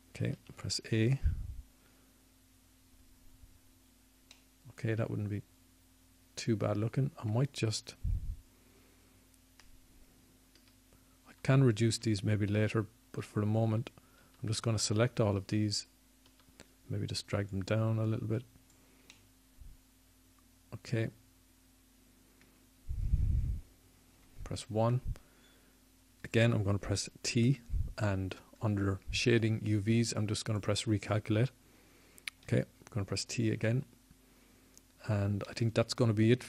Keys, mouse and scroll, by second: 1.1 click, 1.1 s, 3.6-5.6 drag, 5.6 a, 6.9 click, 7.1 middle click, 9.9-12.3 middle drag, 15.8-21.6 typing, 22.8-24.8 drag, 29.3 KP_1, 29.4 KP_1, 32.4 t, 35.7-36.4 drag.